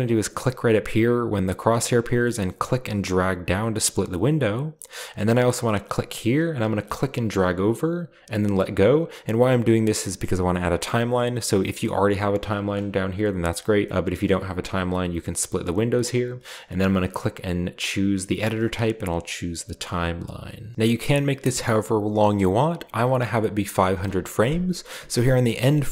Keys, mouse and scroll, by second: 2.5 click, 3.4 middle click, 3.8 middle click, 3.8-5.1 drag, 6.4 click, 8.6-10.1 drag, 10.5 click, 14.5 middle click, 15.1 click, 16.6 middle click, 16.8 click, 18.9-19.5 drag, 20.0 click, 25.3 click.